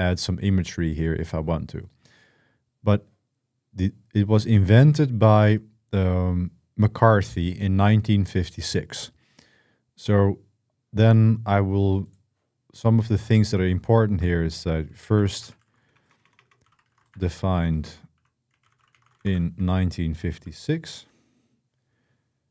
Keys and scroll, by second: 14.8-20.2 typing, 22.3-22.5 typing.